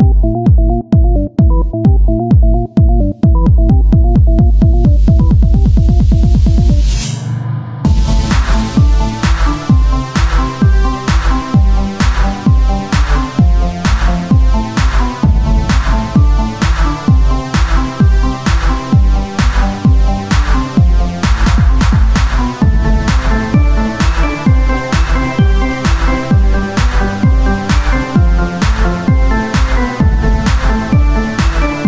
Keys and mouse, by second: 1.6-3.1 middle drag, 3.1 ctrl+r, 5.6-9.9 drag, 7.6-9.9 right drag, 9.9 s, 13.0-15.1 right drag, 15.1 click, 15.5 s, 20.0-22.4 drag, 22.4 ctrl+r, 24.4-26.9 drag, 26.9-30.5 middle drag.